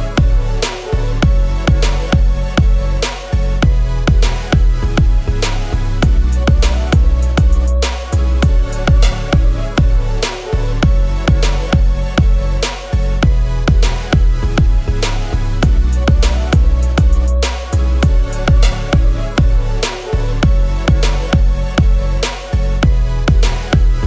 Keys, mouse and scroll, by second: 0.3 ctrl+z, 4.4 shift+click, 5.3 m, 8.3 alt+click, 13.4 BackSpace, 20.4 a, 22.0 ctrl+=, 22.1 ctrl+=.